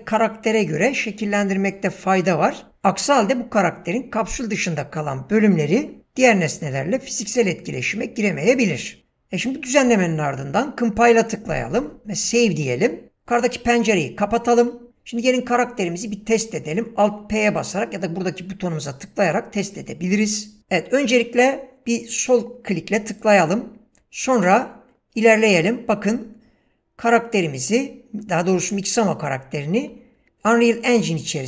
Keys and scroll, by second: 24.0 w, 31.1 s.